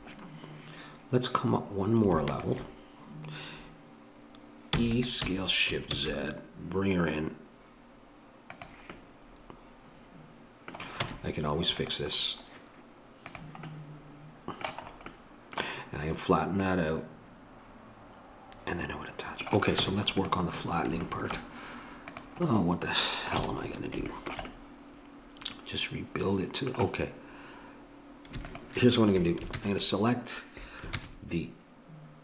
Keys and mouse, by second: 4.7 e, 11.0 Tab, 13.3-18.4 drag, 19.8 Tab, 20.6-22.1 middle drag, 22.1 click, 23.4 a, 23.7-24.7 middle drag, 25.3 middle click, 28.5-29.5 drag, 29.5 ctrl+KP_Add.